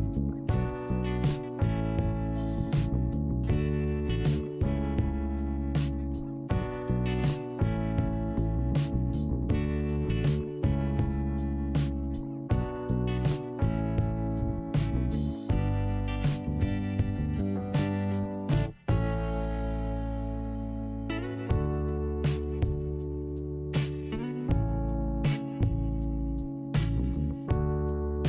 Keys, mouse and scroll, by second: 1.3 scroll up 1, 2.1 click, 3.3 click, 4.4 click, 4.5 click, 6.1 ctrl+i, 6.6 scroll down 1, 7.4 scroll up 2, 8.7 click, 12.3-13.5 scroll down 1, 13.6 scroll up 1, 14.4 click, 18.3 click, 18.4 click, 19.1-19.7 scroll up 1, 20.4 click, 21.6 click, 23.2 click, 24.5 click, 26.1 click, 27.4 click.